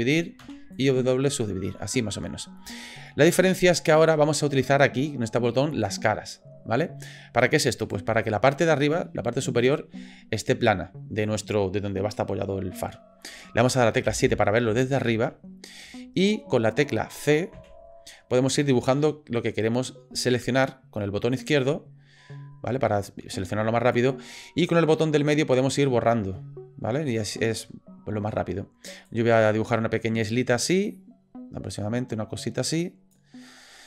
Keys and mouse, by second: 0.4 w, 1.8 middle click, 2.7 shift+click, 3.1 click, 3.9 shift+click, 5.8 click, 7.8 click, 14.0 KP_7, 14.9 shift+middle click, 15.9 shift+middle click.